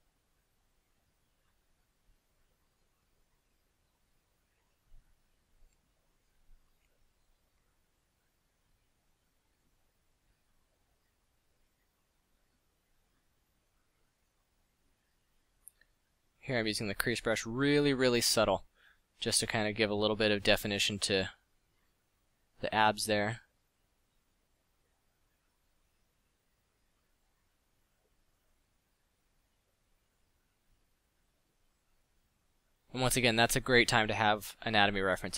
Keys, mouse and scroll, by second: 14.3 f, 28.2 middle drag, 29.5-29.8 middle drag, 34.7 f.